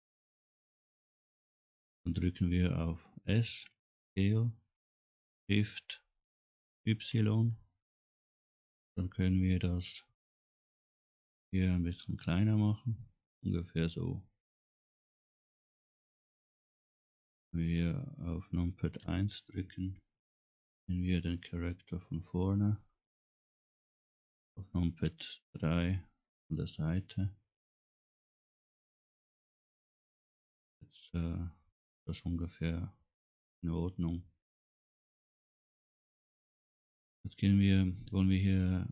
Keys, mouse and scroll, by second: 3.7 s, 19.1 KP_1, 21.1 middle click, 22.3-22.7 scroll up 2, 22.9 scroll down 1, 25.1 KP_3, 27.8-28.2 scroll down 2, 28.5 scroll up 2, 30.9-34.6 middle drag, 34.8 scroll down 1.